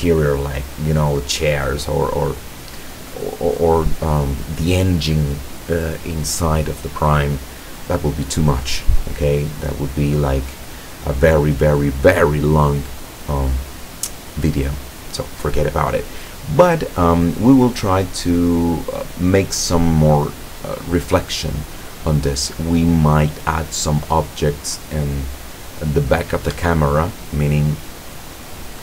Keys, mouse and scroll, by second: 26.6 Escape, 27.1 scroll down 1, 27.4 middle click, 27.9-28.8 middle drag.